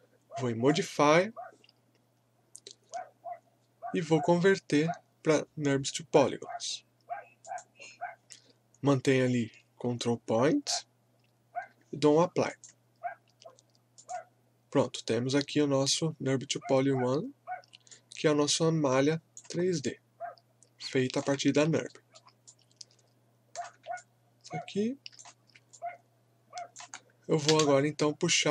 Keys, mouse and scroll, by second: 7.4 click, 12.4 click, 17.9-19.7 drag, 19.7-21.8 alt+drag, 21.8 alt+middle click, 22.5-24.0 alt+drag, 24.0-25.4 alt+drag, 25.4 scroll down 1, 25.7-27.5 alt+drag, 27.5 space.